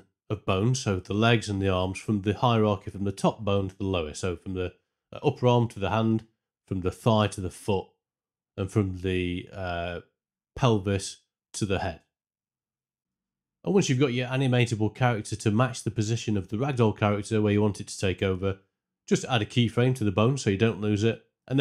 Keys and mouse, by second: 1.1 click, 3.4 click, 5.4 click, 10.2 shift+middle click, 11.5 middle drag, 14.9 Tab, 15.6 ctrl+space, 17.3 Tab, 17.7 a, 19.6 i, 20.8 middle click.